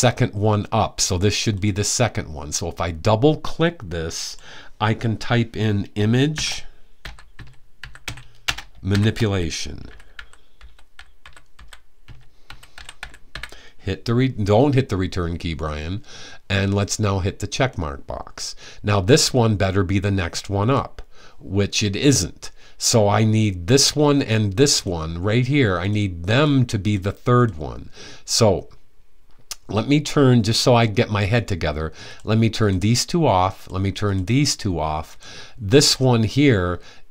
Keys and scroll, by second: 6.0-13.5 typing.